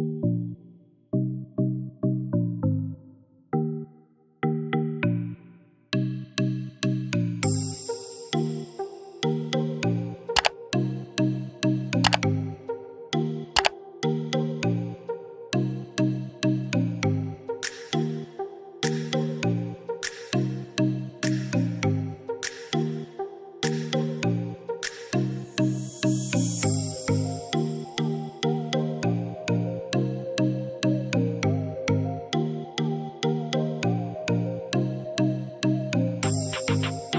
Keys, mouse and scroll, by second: 0.4-3.3 drag, 3.7 click, 9.1-26.6 drag.